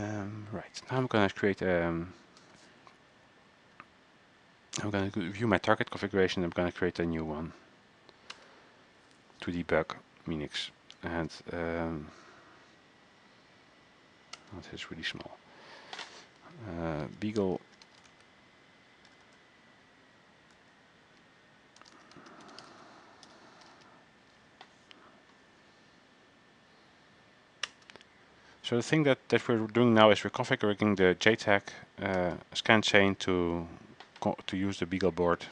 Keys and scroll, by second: 17.0-19.4 typing, 20.7 typing, 21.8-24.3 typing.